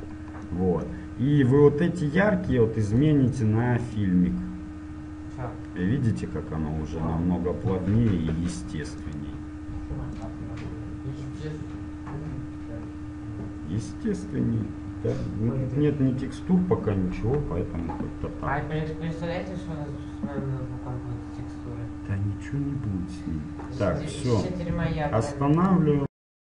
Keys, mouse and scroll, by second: 0.2-2.6 middle drag, 3.1-5.3 drag, 9.2-11.2 drag, 12.3-24.7 middle drag.